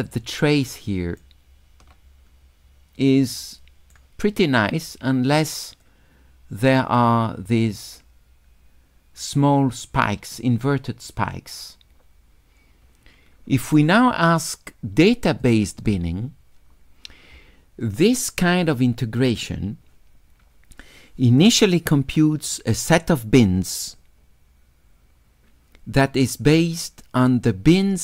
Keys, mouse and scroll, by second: 0.6 shift+click, 3.1 right click, 5.0 right click, 5.8 click, 15.4 click.